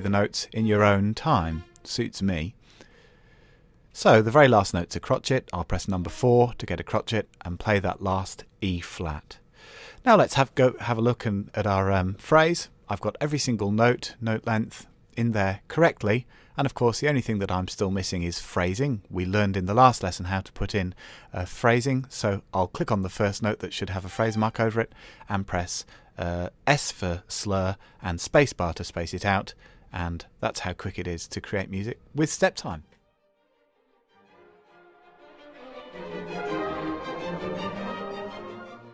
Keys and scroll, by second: 4.9 KP_4.